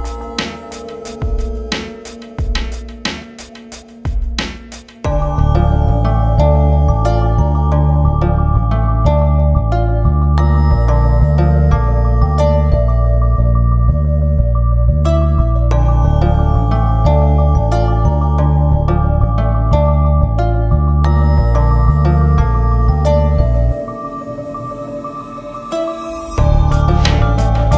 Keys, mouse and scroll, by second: 0.7-3.1 drag, 3.1 scroll up 1, 3.6 click, 4.4 scroll down 1, 5.0 click, 5.2 F4, 6.2-11.6 drag, 11.6 scroll up 1, 12.6-16.0 drag, 16.0 scroll up 1, 16.8 click, 17.5 scroll down 1, 18.7 F4, 19.7-21.5 drag, 21.7-24.3 drag, 25.6 click, 26.3 F4, 27.4-27.7 drag.